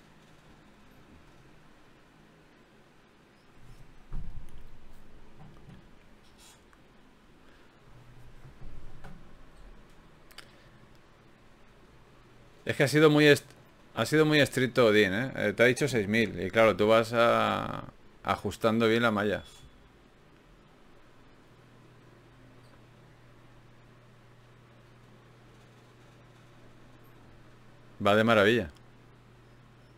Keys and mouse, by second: 0.4 Tab, 3.8 g, 4.6 g, 5.8 g, 6.6 g, 8.4 g, 15.7-17.5 drag, 16.2 g, 16.8 right click, 17.5 g, 18.9-20.4 drag, 20.4-21.7 middle drag, 22.9 a, 23.2 a.